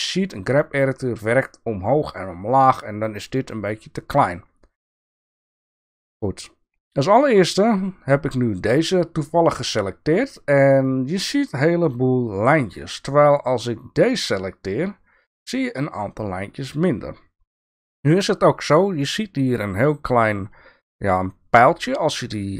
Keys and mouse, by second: 5.2-6.2 shift+middle drag, 19.7-22.5 drag.